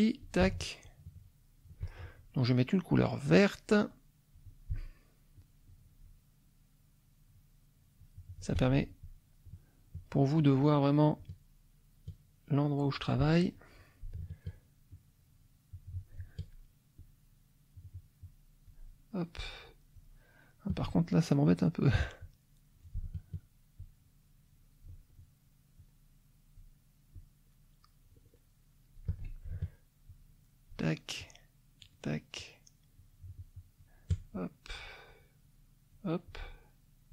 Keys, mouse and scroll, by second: 0.8-1.8 shift+drag, 3.3 click, 5.3-8.6 shift+drag, 9.4 shift+click, 10.4 shift+click, 11.2-13.3 shift+drag, 13.4 shift+middle click, 13.7 click, 14.9-16.2 shift+drag, 17.0-18.8 shift+drag, 19.5 shift+click, 22.2 click, 23.7-25.0 shift+drag, 25.7-26.7 shift+drag, 27.1-29.1 shift+drag, 30.1 shift+click, 31.2 shift+click, 32.3-33.9 shift+drag, 34.3-36.1 shift+drag, 36.2-37.1 shift+drag.